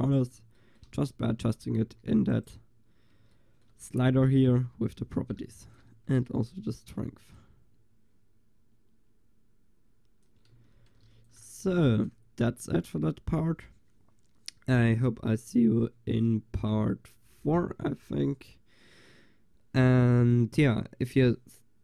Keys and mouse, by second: 1.0-1.9 middle drag, 1.0 shift+z, 1.9 g, 2.4-3.6 middle drag, 4.1 drag, 5.6 ctrl+s, 6.5 shift+z, 10.6 shift+z, 11.1 ctrl+s, 11.8 ctrl+s.